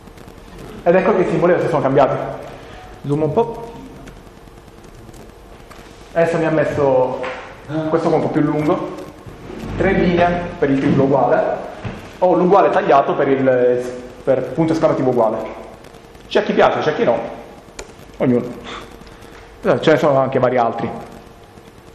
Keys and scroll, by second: 3.9 ctrl++, 4.5 ctrl++, 17.8 Return, 18.6 shift+0.